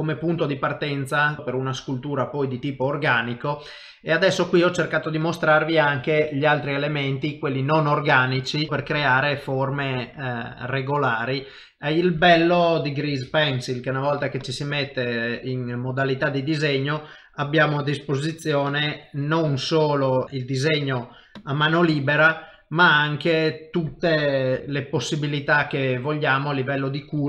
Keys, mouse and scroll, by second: 3.0 middle click, 5.4 middle click, 8.3 middle click, 8.7 middle click, 13.5 shift+v, 18.7 click.